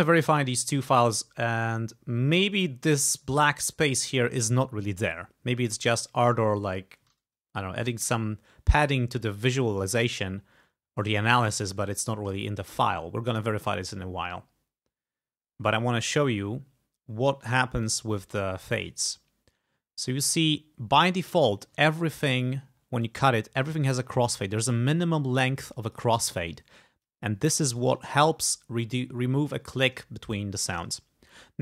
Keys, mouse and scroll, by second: 0.3 click, 5.8 click, 12.3 click, 17.9 click, 19.1-20.0 ctrl+scroll up 4, 20.4 ctrl+scroll down 2, 20.8 ctrl+scroll up 2, 21.3 ctrl+click, 22.0 ctrl+click, 22.3 ctrl+click, 23.1-26.2 drag, 26.3 ctrl+scroll up 2, 27.1 click, 28.1 ctrl+scroll up 2.